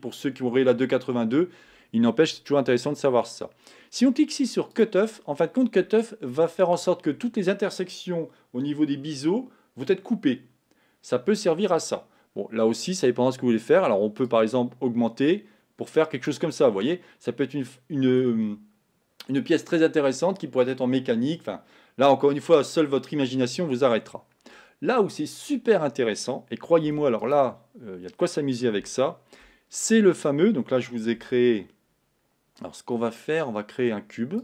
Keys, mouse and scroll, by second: 5.2 click, 5.8 middle click, 6.6-11.3 scroll up 2, 14.8-16.7 drag, 16.7-27.6 middle drag, 27.6 x, 28.0 scroll down 2, 28.9-34.4 shift+middle drag.